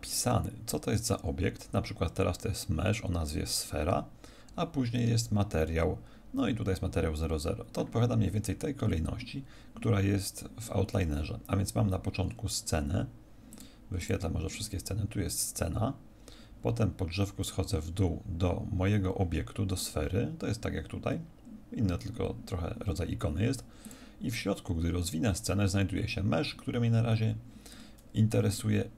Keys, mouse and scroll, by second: 9.4-11.1 scroll down 1, 11.1-11.4 scroll down 2, 12.1-13.5 scroll up 1, 13.5 click, 13.5 scroll up 2, 16.9-18.7 scroll down 2, 23.8 click, 24.5-25.3 scroll down 2, 25.3-25.7 scroll down 1, 28.5 click.